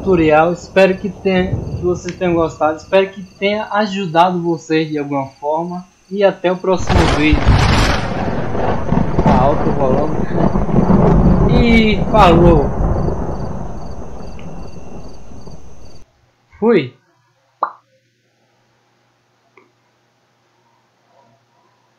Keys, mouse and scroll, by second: 19.7 click, 21.9 click.